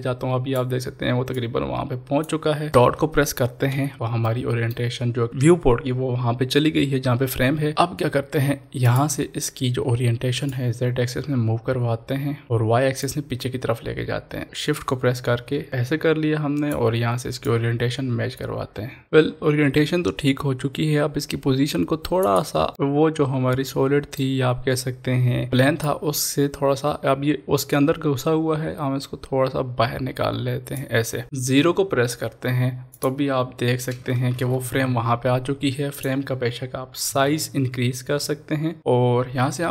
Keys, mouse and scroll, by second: 4.3 middle click, 5.1 scroll up 1, 5.3-8.9 middle drag, 8.9-17.5 drag, 17.5-22.7 shift+drag, 22.7-25.9 middle drag, 25.9-32.6 shift+drag, 33.0 shift+click, 34.3 ctrl+s, 36.0 click, 37.3 s, 38.8 click.